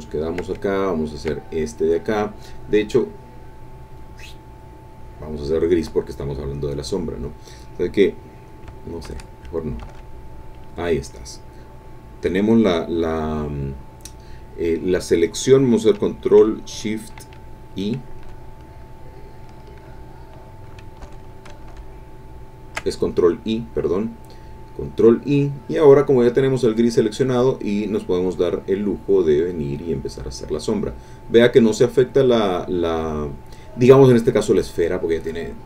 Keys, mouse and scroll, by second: 0.0 ctrl+middle click, 1.1 ctrl+click, 1.5 ctrl+click, 3.9-5.4 drag, 6.7 click, 9.0 ctrl+z, 9.9 ctrl+z, 21.0 ctrl+shift+i, 21.1 ctrl+shift+click, 21.7 ctrl+shift+i, 25.3 click, 27.2-35.6 drag.